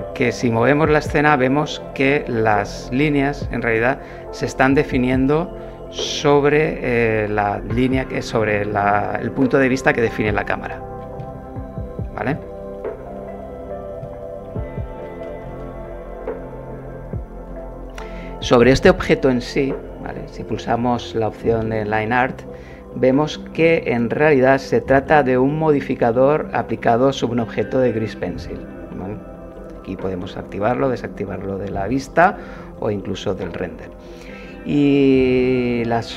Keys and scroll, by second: 15.5 KP_0, 17.5 Pause.